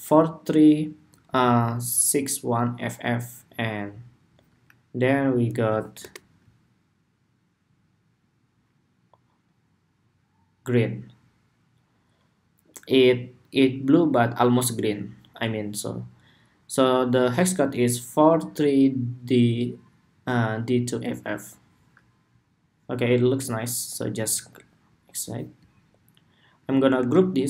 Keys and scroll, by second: 0.9 super+c, 5.3 super+v, 26.7 super+g.